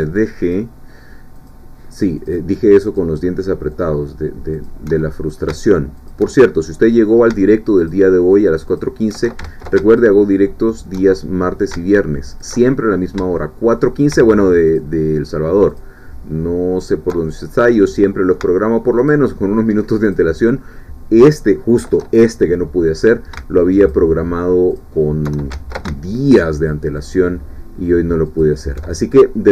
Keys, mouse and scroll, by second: 0.4 alt+shift+click, 1.5-3.2 alt+shift+drag, 3.8-4.8 drag, 5.0-6.0 alt+shift+middle drag, 6.0 alt+shift+click, 6.6-7.8 alt+shift+middle drag, 7.8 alt+shift+click, 8.8 alt+shift+click, 9.4 ctrl+z, 10.0 ctrl+alt+shift+click, 10.7 alt+shift+click, 11.1-12.3 alt+shift+middle drag, 12.3 alt+shift+click, 12.7-13.9 alt+shift+middle drag, 14.8-16.0 alt+shift+drag, 16.9 alt+shift+click, 17.2-18.8 alt+shift+middle drag, 19.0 alt+shift+click, 20.1 alt+shift+click, 21.2 alt+shift+click, 22.0-23.3 middle drag, 23.8 alt+shift+click, 24.8 alt+shift+click, 25.5 ctrl+alt+shift+z, 26.4 alt+shift+click, 28.4 alt+shift+click, 28.8 alt+shift+middle click.